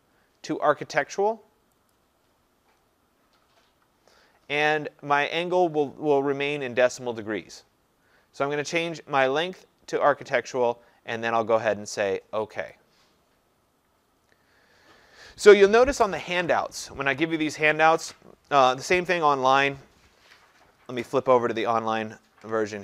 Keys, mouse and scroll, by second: 2.0 click, 4.4-7.0 drag, 12.8-17.8 drag, 21.0 click.